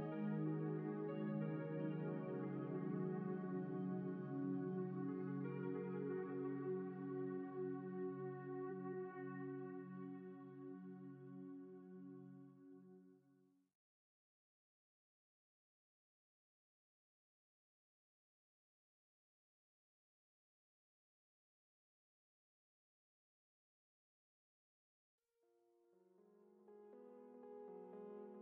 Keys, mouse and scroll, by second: 0.4 f, 1.3 click, 1.6 f, 2.4 click, 4.6-6.0 drag, 6.4 f, 6.8-8.6 drag, 8.2 f, 9.1-10.6 drag, 11.6 click, 12.2 ctrl+z, 12.3 ctrl+z, 13.0 click, 13.5 f, 16.9 f, 17.7 ctrl+z, 18.3 f, 18.5 click, 20.2 alt+a, 20.4-22.1 drag, 20.4-21.7 right drag, 20.9 alt+a, 23.3-28.4 drag.